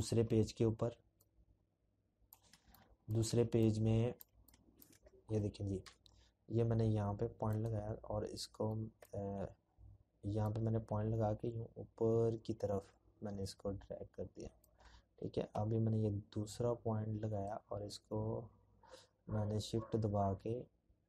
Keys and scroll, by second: 1.0 z, 2.6 p.